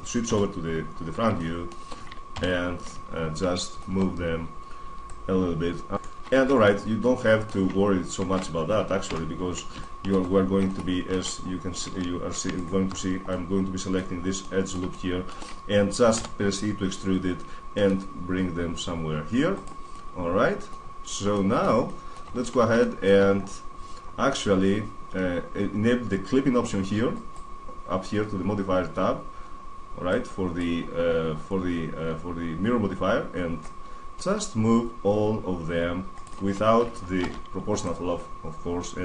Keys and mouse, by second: 0.1 KP_1, 2.1 ctrl+KP_1, 2.5 middle click, 2.9 middle click, 4.8-6.1 drag, 6.3 Tab, 6.5 middle drag, 6.7-8.5 middle drag, 8.8 n, 10.5-11.2 middle drag, 11.6 Tab, 12.3 middle click, 12.5-14.2 middle drag, 15.1 middle click, 15.2 middle click, 15.9 e, 17.9 middle click, 19.4-20.5 drag, 20.5-26.9 middle drag, 26.9-28.7 drag, 29.9-31.7 drag, 33.3-35.2 drag, 36.9 alt+o, 37.6-39.0 drag.